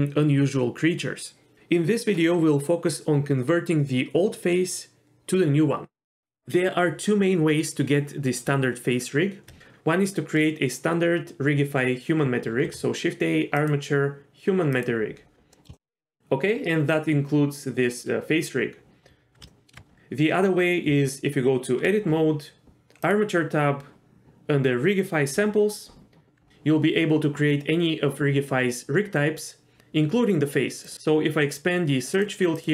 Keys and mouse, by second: 12.5 shift+a, 15.5 middle drag, 15.8 shift+middle click, 19.5 shift+middle drag, 20.9 Tab, 23.0 click, 30.9 click, 32.1 click, 32.5-32.7 drag.